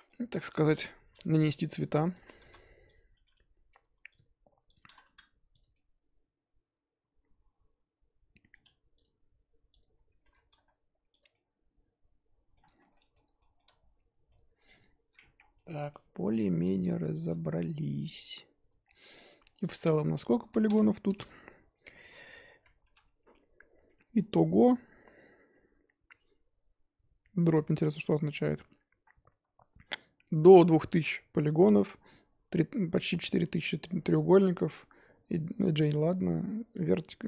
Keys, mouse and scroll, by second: 0.0-2.4 middle drag, 2.4-2.9 drag, 3.0 scroll down 3, 3.2-4.1 middle drag, 4.1 click, 5.2 click, 5.7-8.7 middle drag, 9.0 click, 10.5-11.2 drag, 11.3-12.7 middle drag, 12.7 scroll down 3, 12.9-15.4 middle drag, 15.4 scroll down 2, 15.5-16.2 middle drag, 17.0-18.4 shift+middle drag, 18.4-18.8 scroll up 1, 18.8 scroll down 1, 19.0 middle click, 19.9 click, 20.4 Tab, 20.6 a, 22.8 3, 24.1 a, 24.9 a, 25.3-25.9 scroll up 2, 25.9-27.8 scroll up 1.